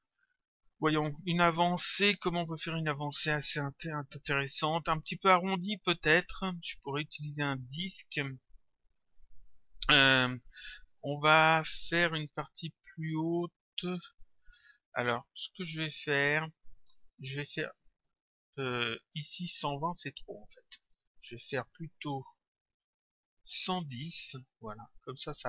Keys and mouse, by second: 20.6 click, 23.1 Return, 25.1 click.